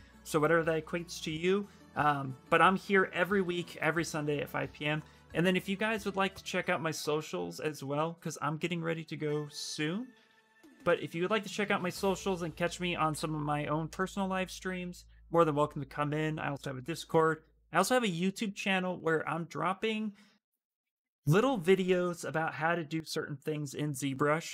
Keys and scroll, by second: 9.9 ctrl+c, 10.6 ctrl+c, 12.8 ctrl+v, 13.6 Return.